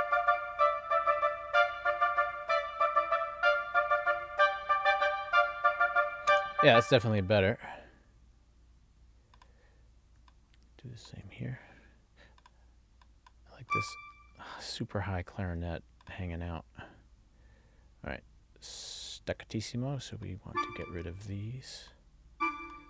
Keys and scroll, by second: 6.4 space.